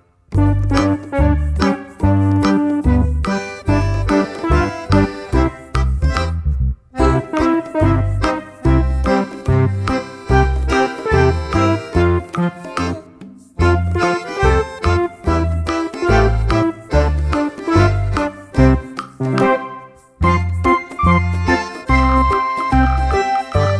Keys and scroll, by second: 1.0 ctrl+v, 22.8 4, 22.9 4, 23.0 Return.